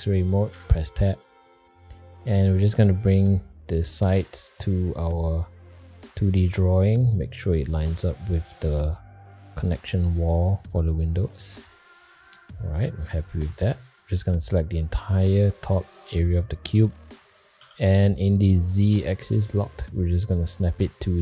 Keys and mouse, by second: 0.5 Tab, 1.2 click, 2.6 click, 4.0 g, 6.9 click, 7.8 g, 12.0 middle click, 13.1 middle click, 13.9 middle click, 14.4 click, 15.9 shift+middle click, 16.3 middle click, 17.6 g.